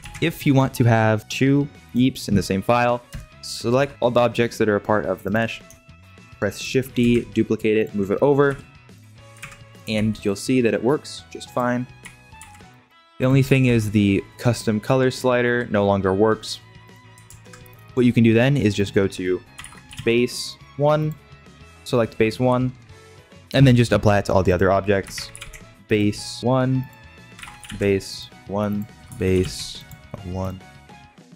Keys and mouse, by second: 0.3 ctrl+s, 1.8 click, 3.8 shift+], 3.9 g, 6.0 shift+middle click, 6.7 shift+d, 8.4 KP_Decimal, 9.3 ctrl+Tab, 9.9 g, 12.0 g, 12.3 alt+shift+Left, 12.3 alt+h, 13.6 g, 17.2 ctrl+Tab, 24.4 click, 26.8 click.